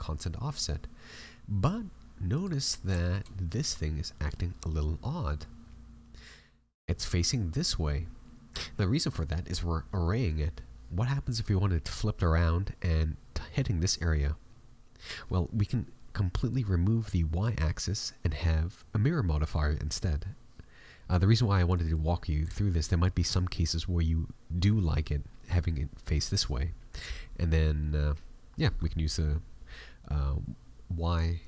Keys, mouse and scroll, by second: 2.6-2.9 scroll down 4, 2.9 shift+middle click, 4.1 middle click, 8.7-9.2 scroll down 2, 9.0 middle click, 21.7 middle click, 22.5 shift+middle click.